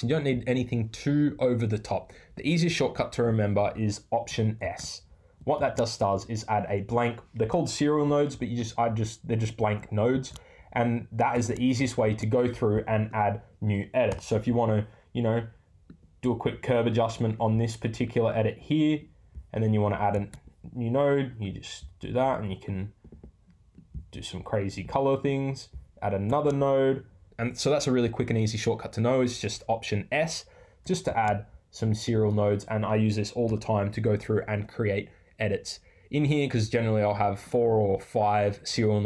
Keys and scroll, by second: 7.5 BackSpace, 14.0 BackSpace, 33.4 BackSpace.